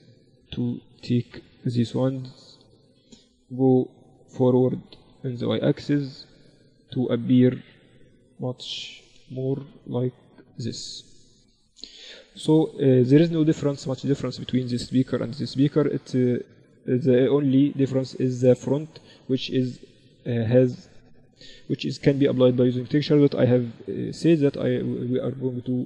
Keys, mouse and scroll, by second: 0.1 z, 1.1 ctrl+alt+shift+c, 1.6 click, 2.7-4.7 drag, 4.7-7.6 middle drag, 6.0-12.9 drag, 9.1 middle click, 12.3 z, 12.9-15.7 middle drag, 15.7-18.2 right drag, 17.8-19.7 drag, 19.7-24.9 middle drag.